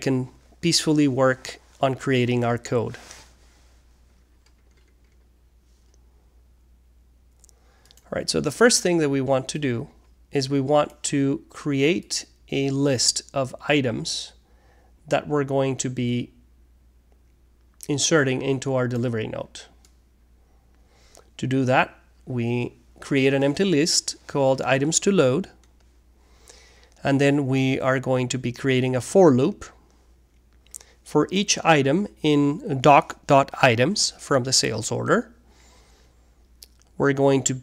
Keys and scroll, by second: 7.5 alt+3, 7.8 space, 9.5-18.5 typing, 19.5 Return, 19.8-24.4 typing, 25.7 space, 28.9 Return, 29.4-33.3 typing, 34.6 Return, 35.0 Tab, 36.1-37.6 typing.